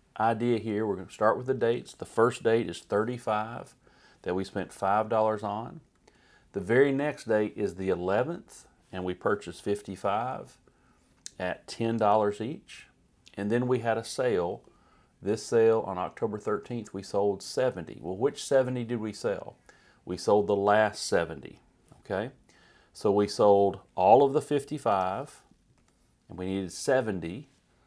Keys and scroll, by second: 2.1-3.1 typing, 3.5 Right, 5.4 Down, 5.9 Left, 9.4 5, 10.9 Right, 11.6-12.5 typing, 12.5 Right, 25.8 Up.